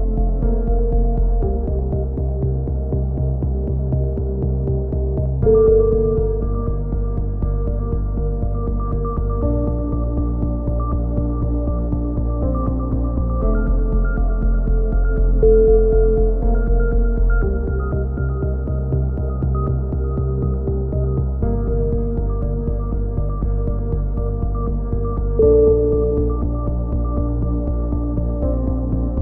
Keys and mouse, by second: 0.1 right click, 0.3 click, 1.3 right click, 1.8 click, 2.2 middle click, 2.9 b, 3.7 b, 4.6 click, 5.0 middle click, 5.2 g, 5.8 ctrl+z, 5.9 click, 6.3 g, 6.4 middle click, 7.4 a, 7.6 z, 7.9 click, 12.1 KP_7, 12.6 click, 12.6 z, 16.1 z, 16.3 click, 16.6 right click, 16.8 z, 17.1 KP_7, 18.9-20.0 drag, 20.0 ctrl+z, 20.1 a, 20.4 middle click, 20.6 click, 21.8 click, 22.6-24.3 typing, 23.0 middle click, 24.5 middle click, 27.3-29.2 typing.